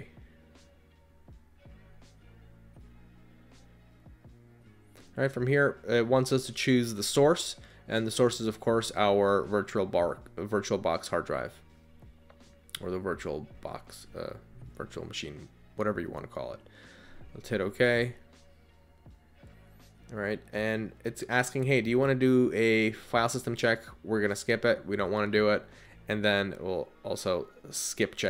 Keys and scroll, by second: 2.2 Down, 3.2 Return, 13.0 Down, 13.6 Right, 14.6 Down, 14.9 Down, 15.3 Tab, 20.4 Return, 25.5 Return, 27.9 Down.